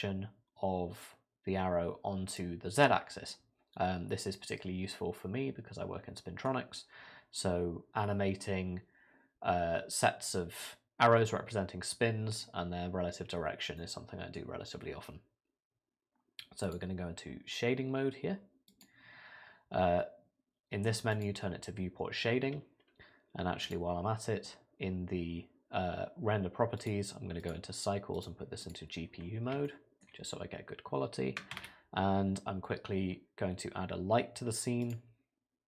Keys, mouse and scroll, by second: 3.3 middle click, 13.8 middle click, 16.6 click, 18.8 click, 21.5 click, 23.6 click, 26.8 click, 28.1 click, 29.6 shift+middle click, 30.2-30.9 scroll down 2, 31.5 shift+a.